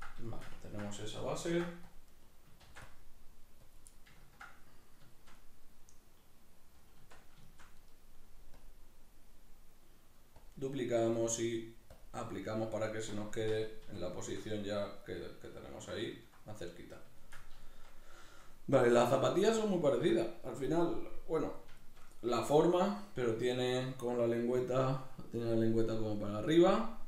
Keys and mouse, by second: 1.5 ctrl+r, 2.3 right click, 2.7 ctrl+r, 3.8 click, 7.0 Tab, 8.6-13.1 drag, 13.1-27.0 middle drag, 13.3 Tab.